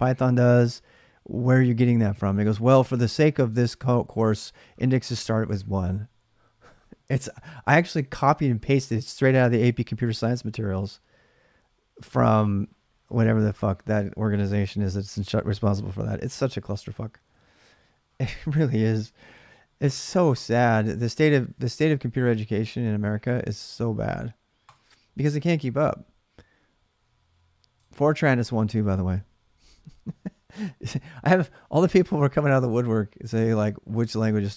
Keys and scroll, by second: 21.0 alt+Tab, 22.4 alt+Tab.